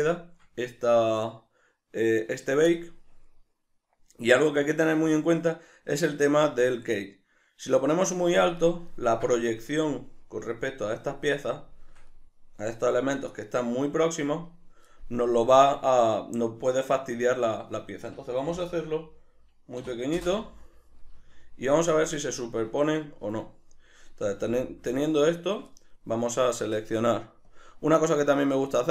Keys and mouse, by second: 15.6-21.0 drag, 20.2 Return, 21.0-21.7 ctrl+middle drag, 24.3 a, 25.0 shift+middle click, 25.5-27.4 middle drag, 27.4 click.